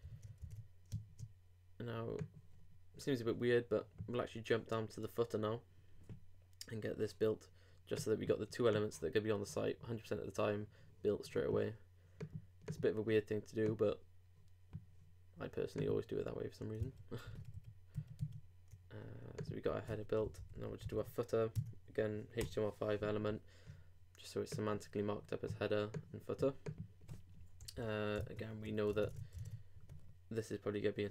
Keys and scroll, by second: 0.9 super+space, 16.8 super+2, 17.3 super+3, 17.5 super+4, 18.2 super+3, 28.1 super+., 28.2 super+Tab.